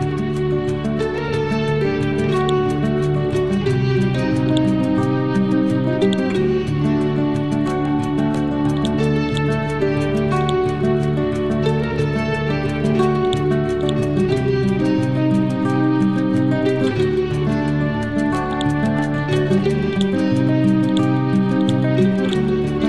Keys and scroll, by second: 12.3 ctrl+z, 15.6 2, 15.8 0, 16.1 Return.